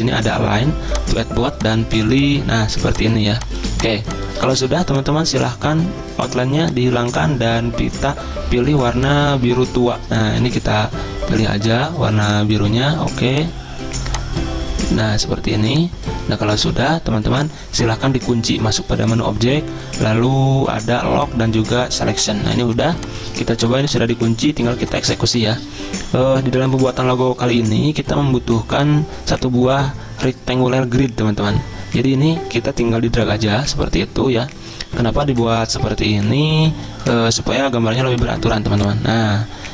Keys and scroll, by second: 2.7 z, 4.6 v, 22.4 z, 23.4 v, 24.6 z, 35.9 d, 38.6 z.